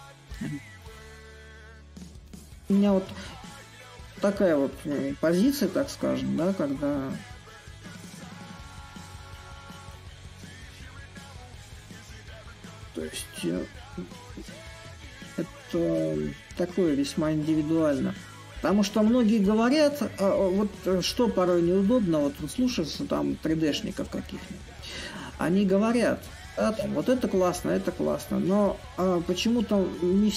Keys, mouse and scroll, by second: 4.9 a, 6.4-11.5 drag, 11.5-16.6 drag, 17.2-22.3 drag, 22.4-27.5 drag, 28.3-30.3 drag.